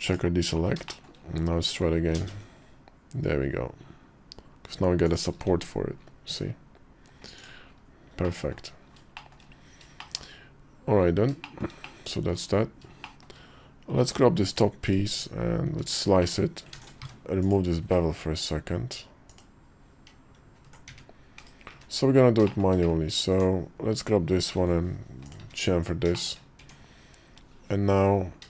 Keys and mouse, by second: 0.7 shift+middle click, 1.9 ctrl+b, 5.2 Tab, 6.0 /, 7.1 click, 8.0 middle click, 8.9 shift+middle click, 9.7 shift+middle click, 9.9 shift+click, 11.2 shift+middle click, 11.6 middle click, 12.8 shift+middle click, 14.6 /, 16.0 middle click, 16.8 `, 17.7 middle click, 19.0 click, 20.3 /, 20.5 Tab, 20.5 ctrl+z, 20.6 `, 21.1 /, 21.5 `, 22.2 shift+middle click, 22.6 middle click, 23.1 Tab, 24.2 ctrl+b, 25.2 `, 26.0 shift+middle click, 26.4 Tab, 28.3 shift+middle click.